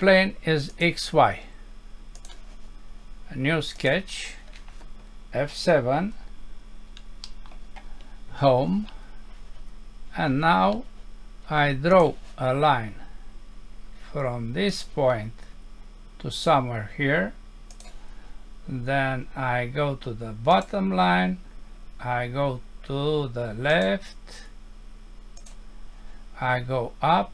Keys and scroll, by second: 6.0 F7, 7.3 Home.